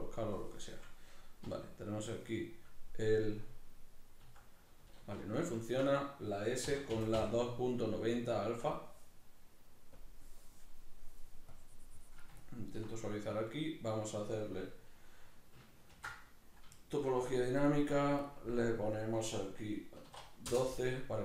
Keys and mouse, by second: 0.0-3.9 drag, 3.9 middle click, 4.3 s, 5.5 ctrl+middle click, 6.7 s, 7.9 shift+middle click, 10.0-12.4 drag, 12.4 ctrl+middle click, 16.2 ctrl+d, 16.8 shift+middle click, 17.6-21.2 drag.